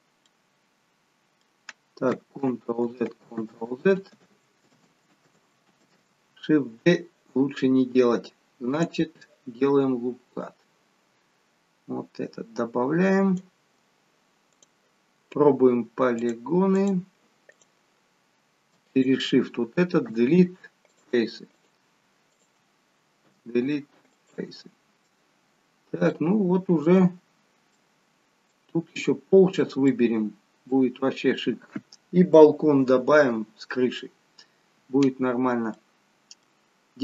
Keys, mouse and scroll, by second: 0.4 middle click, 2.5 ctrl+z, 3.1 ctrl+z, 3.7 ctrl+z, 4.3 ctrl+z, 4.9 ctrl+z, 5.9 ctrl+z, 8.8 click, 10.5 click, 14.7 click, 16.3 click, 17.6 click, 19.1 shift+click, 19.3 shift+click, 20.2 Delete, 21.6 click, 22.5 shift+click, 23.4 Delete, 25.0 scroll down 2, 25.9 scroll up 4, 26.2 shift+middle click, 27.4-28.1 scroll down 2, 27.9 middle click, 29.5 scroll down 1, 30.0 middle click, 35.9 middle click.